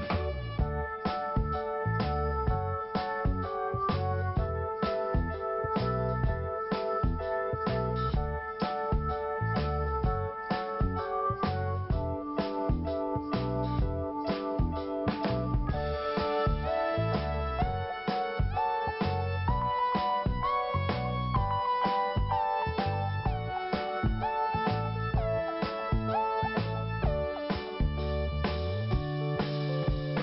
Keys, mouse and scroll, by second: 2.6 click, 2.7 click, 3.5 click, 3.5 click, 4.6 click, 4.7 click, 5.4 click, 5.5 click, 12.5 click, 18.9 click, 19.0 click, 19.0 click, 19.1 click, 20.5 click, 24.6 click, 24.7 click, 26.2 click, 26.3 click, 27.2 click.